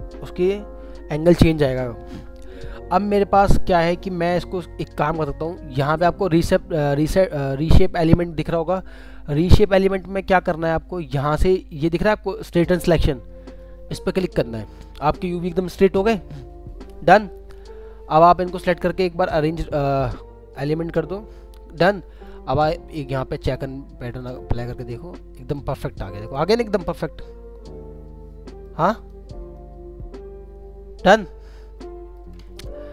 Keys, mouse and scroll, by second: 17.7 scroll down 1, 26.0 middle click.